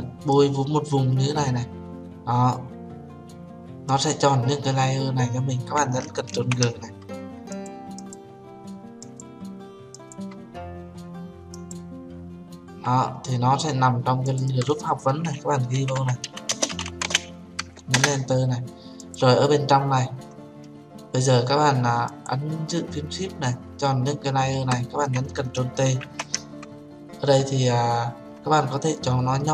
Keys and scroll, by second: 6.8 ctrl+g, 18.4 Return, 26.5 ctrl+t.